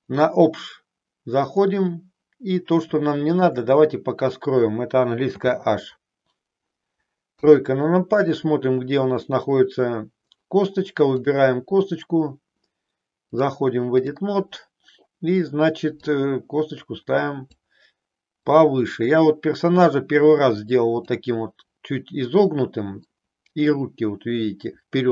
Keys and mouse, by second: 5.3 h, 7.3 KP_3, 13.3 click, 16.0-17.6 drag, 18.4-21.0 drag, 23.8-25.1 middle drag.